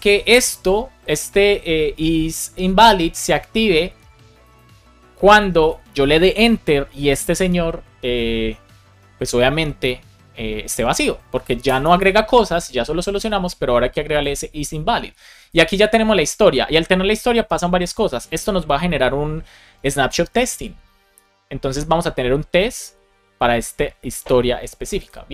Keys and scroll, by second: 11.5 Return.